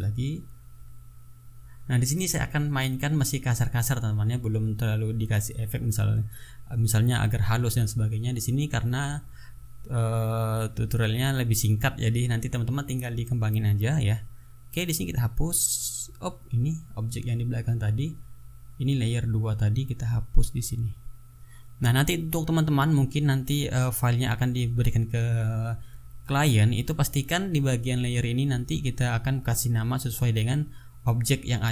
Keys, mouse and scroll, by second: 2.6 click, 3.9-11.5 drag, 11.6 middle click, 12.3-13.8 drag, 13.8-18.4 drag, 18.5 click, 19.8 click, 20.7 click, 21.4 click, 22.9-24.2 ctrl+drag, 24.3 ctrl+click, 25.1 ctrl+click, 25.8 ctrl+click, 30.0 ctrl+click.